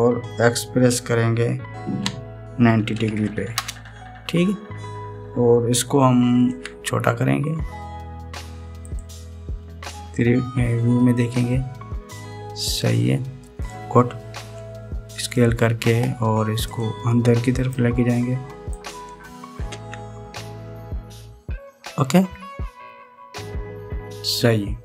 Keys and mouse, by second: 0.0 r, 7.2 s, 11.1 KP_3, 15.3 s, 17.4 drag, 18.7 click, 20.4 KP_1.